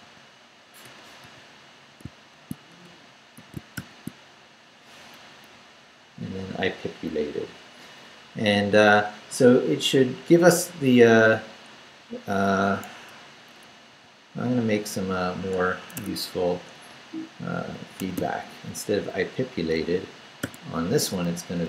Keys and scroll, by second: 0.0-3.7 typing, 5.5 Down, 12.9 Escape, 13.9 y, 15.8 Escape, 18.0 d, 18.7 Up, 20.4 o, 21.5-21.6 typing.